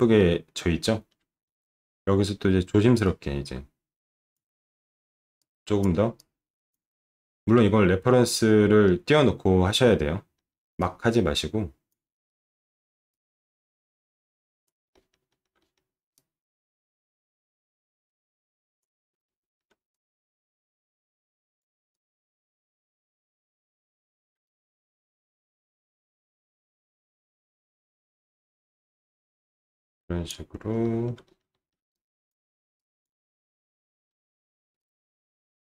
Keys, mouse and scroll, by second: 0.2 alt+middle click, 1.4 alt+middle click, 3.0-4.3 drag, 5.4 click, 6.1 click, 7.0 alt+middle click, 8.9 alt+middle click, 10.3 alt+middle click, 10.8-11.9 drag, 13.1-14.6 drag, 14.9 alt+middle click, 15.3 alt+middle click, 15.6 alt+middle click, 16.1-18.8 drag, 19.2 alt+middle click, 19.9-21.6 drag, 21.9-23.4 drag, 23.6 alt+middle click, 24.1 alt+middle click, 24.4 click, 25.9 alt+middle click, 26.3 alt+middle click, 26.9 alt+middle click, 27.2 middle click, 27.5 alt+middle click, 27.9 click, 29.5 click, 30.8 alt+middle click, 31.3 middle click, 31.5 alt+middle click, 31.9 click, 32.7 click, 33.5 alt+middle click, 33.7 alt+middle click, 34.1 alt+middle click, 34.7 click.